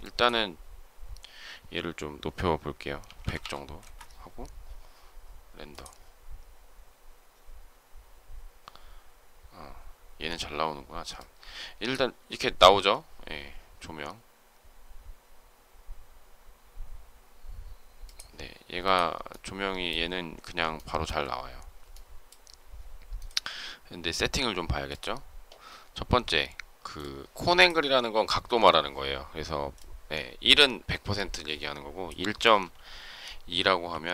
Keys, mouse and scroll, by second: 3.7 Return, 20.6 shift+middle click.